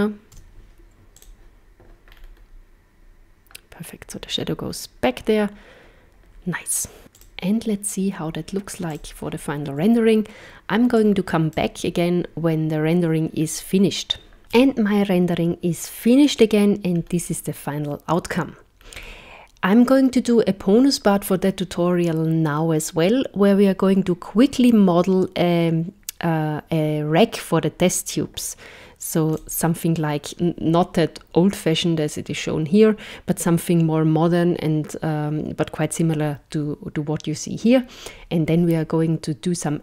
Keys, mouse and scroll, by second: 0.3 z, 2.1-2.5 scroll up 4, 7.1 click.